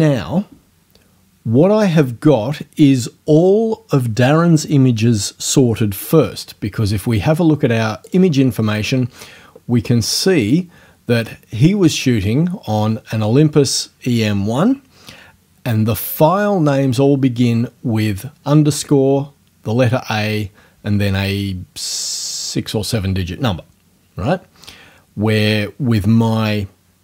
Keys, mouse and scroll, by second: 8.1 click, 10.2 click.